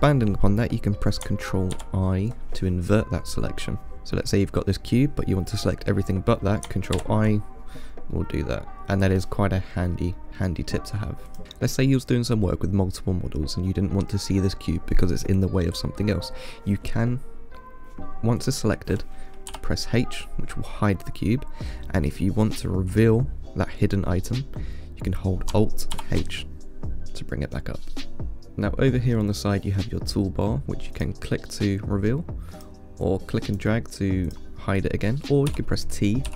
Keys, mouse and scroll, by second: 2.0 ctrl+i, 4.1 click, 7.2 ctrl+i, 8.4-12.1 middle drag, 12.1-12.6 scroll up 2, 12.6-13.6 scroll down 1, 13.6-13.9 scroll down 1, 13.9-14.5 middle drag, 14.5-15.8 scroll up 1, 18.6 click, 19.7 h, 26.2 alt+h, 28.5-30.9 scroll down 4, 31.2-33.7 drag, 33.8 click, 34.5 click, 35.7 t.